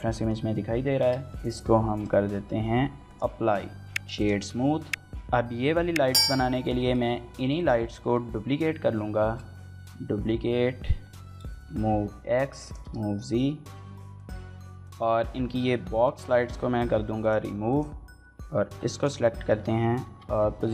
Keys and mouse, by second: 0.7 ctrl+a, 3.7 ctrl+a, 4.2 shift+click, 4.3 right click, 4.8 middle click, 5.7 shift+middle click, 6.0 middle click, 6.6 shift+middle click, 7.4 click, 7.9 middle click, 9.0 shift+d, 11.1-14.4 typing, 11.6 shift+click, 11.8 right click, 12.2 click, 12.5 click, 12.8 click, 12.9 click, 13.6 middle click, 13.8 click, 14.0 middle click, 14.1 click, 14.6 shift+middle click, 14.7 Tab, 15.6 l, 16.0 x, 18.5 l, 19.9 g.